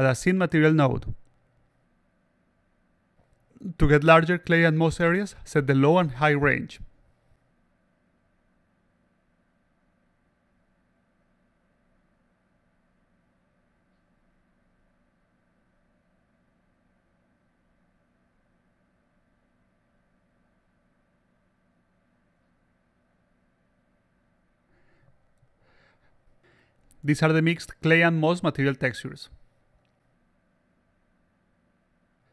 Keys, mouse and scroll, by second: 3.4 click, 5.1 click, 10.6 click, 19.1-19.7 alt+drag, 19.9 alt+drag, 20.3-21.7 alt+drag, 21.9-22.3 alt+drag, 23.5 click, 24.2 click, 24.6 alt+click, 26.2 click, 27.0 click, 27.9 click, 29.2 click.